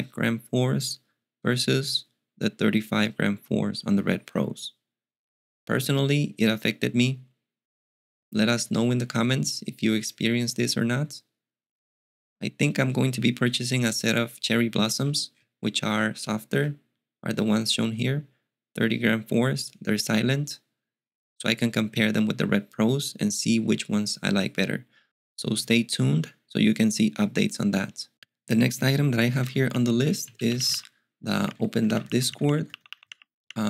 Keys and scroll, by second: 29.1-33.6 typing.